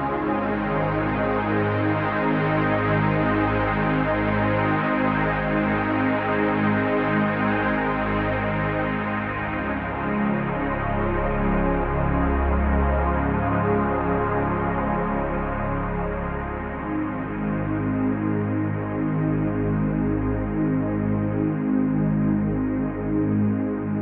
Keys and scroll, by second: 3.8 Right, 11.5 ctrl+j.